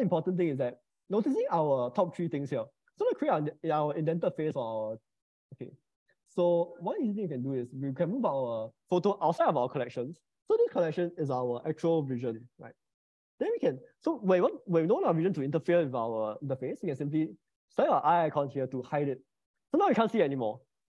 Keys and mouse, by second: 1.0 click, 5.9 click, 11.9 shift+click, 19.0 click.